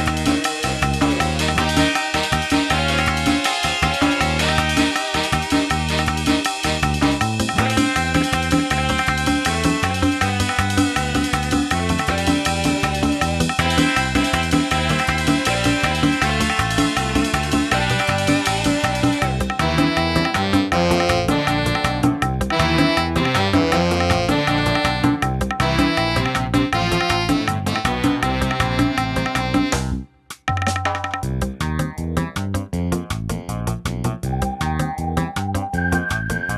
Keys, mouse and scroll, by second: 13.1 middle click, 14.2 scroll down 2, 14.7 middle click, 17.4 middle click, 17.5-18.3 scroll up 5, 18.7 middle click, 19.3-20.1 scroll up 1, 20.1 click, 20.7 click, 21.8 click, 26.3 scroll up 1, 26.4 middle click, 26.8 scroll up 1, 28.4 shift+a, 35.5 scroll down 2, 35.8 scroll up 2, 36.2 middle click.